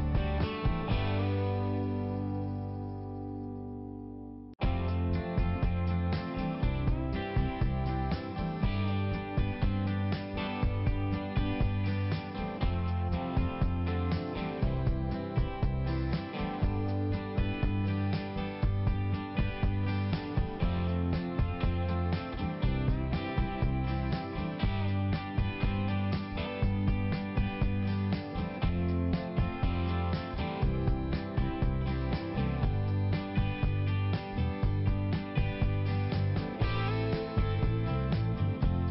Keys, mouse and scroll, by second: 0.0 double click, 0.4 double click, 0.5 double click, 0.7 double click, 1.4 click, 4.1 click, 4.2 click, 5.0 typing, 5.5 click, 5.9 click, 6.3 click, 6.4 double click, 6.6 double click, 6.9 double click, 7.0 double click, 7.2 double click, 7.5 double click, 7.6 double click, 7.7 double click, 8.1 double click, 8.1 double click, 8.3 double click, 8.9 click, 9.1 click, 9.4 click, 9.7 click, 10.0 double click, 10.5 click, 10.6 click, 10.8 double click, 11.4 double click, 12.4 click, 12.5 click, 12.6 click, 13.0 click, 13.4 click, 13.6 click, 13.7 click, 13.8 double click, 14.0 double click, 14.5 double click, 16.4 click, 16.5 click, 16.7 click, 17.2 click, 17.5 click, 17.7 double click, 18.6 double click, 19.0 double click, 19.2 double click, 19.5 double click, 19.6 double click, 19.7 double click, 19.9 double click, 20.1 double click, 20.3 double click, 20.4 double click, 20.7 double click, 20.9 double click, 21.1 double click, 21.3 double click, 21.4 double click, 21.7 double click, 22.0 double click, 22.5 double click, 22.6 double click, 22.8 double click, 23.1 double click, 23.2 double click, 23.4 double click, 23.7 double click, 23.8 double click, 24.2 double click, 25.5 click, 25.6 click, 25.9 click, 26.0 double click, 26.1 double click, 26.5 double click, 26.6 double click, 26.8 double click, 27.1 click, 27.3 click, 27.6 click, 27.7 double click, 27.9 double click, 28.9 click, 29.4 click, 29.6 click, 29.7 double click, 29.9 double click, 30.4 double click, 30.4 double click, 30.7 double click, 31.1 double click, 31.2 double click, 31.4 double click, 31.9 double click, 32.0 double click, 32.3 double click, 32.4 double click, 33.7 click, 35.5 click, 36.3 ', 38.7 click.